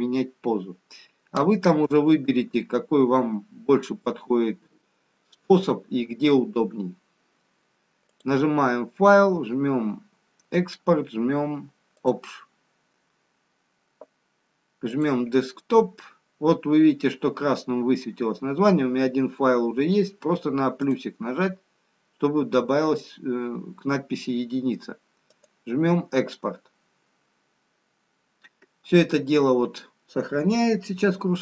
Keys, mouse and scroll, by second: 1.1 scroll up 3, 2.2 shift+middle click, 3.7 middle click, 8.2 click.